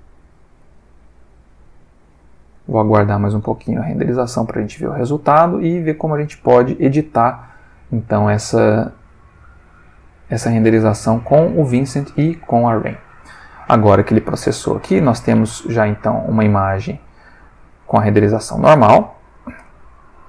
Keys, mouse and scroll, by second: 10.9 click, 15.5-17.1 ctrl+middle drag, 19.4 click.